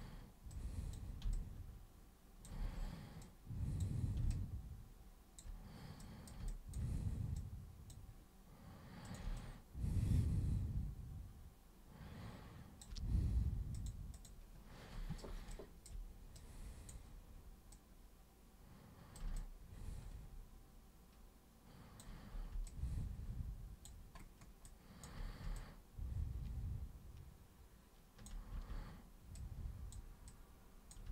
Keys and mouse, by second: 0.6 super+click, 1.3 super+space, 1.3-2.5 alt+super+drag, 2.6 super+w, 3.2 super+click, 4.3-5.4 alt+super+drag, 6.0 super+drag, 6.5 alt+super+click, 7.4 super+click, 9.1 super+click, 9.4-12.8 alt+super+drag, 13.7 super+click, 14.1 super+click, 15.5 alt+super+click, 16.4-16.9 super+drag, 17.7-19.2 super+drag, 19.4-22.0 alt+super+drag, 22.7-23.9 alt+super+drag, 24.7 alt+super+click, 25.6-28.2 alt+super+drag, 28.5 e, 29.4-30.0 super+drag, 30.3 super+click.